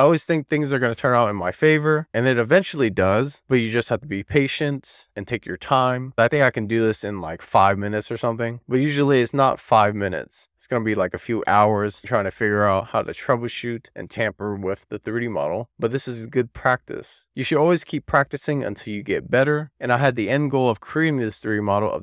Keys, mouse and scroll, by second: 0.1 middle click, 0.4 click, 0.8 click, 1.2 click, 1.6 ctrl+shift+click, 1.7 middle click, 2.1 click, 2.9 click, 3.6 click, 5.7 ctrl+shift+click, 6.6 middle click, 7.3 super+z, 8.1 ctrl+shift+click, 8.9 middle click, 9.8 click, 10.7 middle click, 11.5 click, 11.9 ctrl+shift+click, 12.2 click, 13.4 click, 13.8 ctrl+shift+click, 13.9 middle click, 14.3 click, 15.3 super+z, 15.6 click, 17.1 click, 17.9 click, 18.9 click, 20.5 click, 21.4 click.